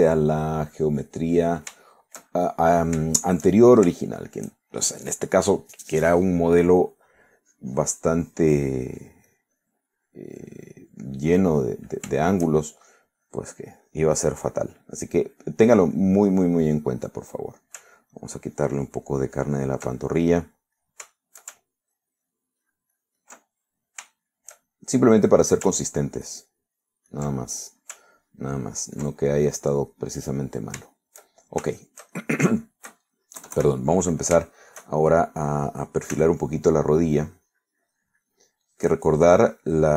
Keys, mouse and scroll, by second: 0.1-1.4 drag, 1.6-2.7 drag, 3.1 shift+middle click, 4.1 shift+middle click, 5.1 shift+middle click, 5.6 shift+scroll up 2, 5.8 shift+middle click, 8.4-10.9 drag, 10.9 scroll up 2, 11.0-13.1 drag, 13.1 shift+scroll up 2, 13.3 shift+middle click, 14.3-15.5 shift+drag, 15.8-17.7 middle drag, 19.2 ctrl+click, 21.0 ctrl+middle click, 22.1 ctrl+shift+middle click, 22.9 ctrl+click, 23.3 ctrl+click, 23.7 ctrl+click, 24.6 ctrl+middle click, 25.2 shift+middle click, 25.9 shift+middle click, 27.0-28.4 ctrl+drag, 28.5 ctrl+middle click, 29.3 ctrl+click, 29.7 ctrl+click, 30.4-31.4 ctrl+middle drag, 31.9 shift+middle click, 32.7-34.1 shift+middle drag, 34.5 KP_Add, 35.5 shift+middle click, 37.2 f, 37.6 click, 38.0-39.6 drag, 39.7-39.9 drag.